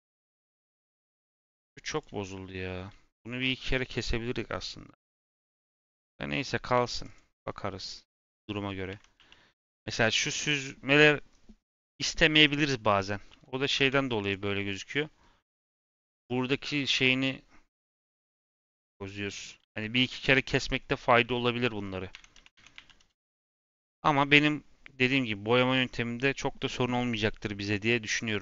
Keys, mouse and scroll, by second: 1.5 Tab, 1.9 click, 2.2 Tab, 5.8 /, 6.2 /, 6.7 Tab, 6.9 click, 7.7 /, 8.1 /, 8.4-8.8 scroll down 5, 8.8 Tab, 9.1 a, 9.6-9.9 scroll up 2, 9.9-12.9 middle drag, 14.9 middle click, 15.5 scroll, 15.5-17.2 scroll up 1, 19.5 ctrl+z, 21.7-22.1 scroll down 4, 22.1 Tab, 22.3 a, 22.5 Tab, 22.7 a, 23.4 click, 25.6-28.4 middle drag.